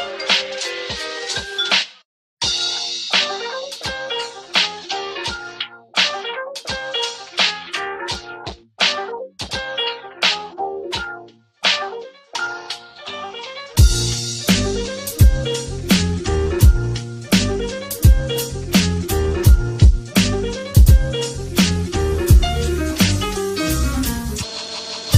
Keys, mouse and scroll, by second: 0.0-0.2 typing, 3.1 space, 6.1 space, 7.1 space, 8.2 space, 9.6 space, 10.9 ctrl+-, 11.1 space, 15.2-18.6 typing, 18.8 right click, 19.9-21.5 typing, 23.3 space, 24.0 space, 24.9 space, 25.0 ctrl+-.